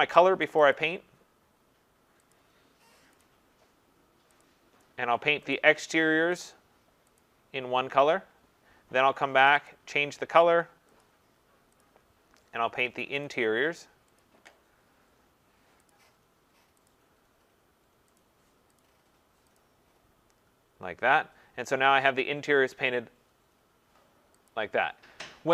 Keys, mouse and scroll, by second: 3.2 click, 4.4 click, 5.5 click, 6.4 click, 7.2 click, 9.5 click, 9.7 click, 11.0 click, 11.8 click, 13.3 click, 14.2 click, 15.9 click, 16.9 click, 18.2 click, 18.8 click, 19.6 click, 24.5 click.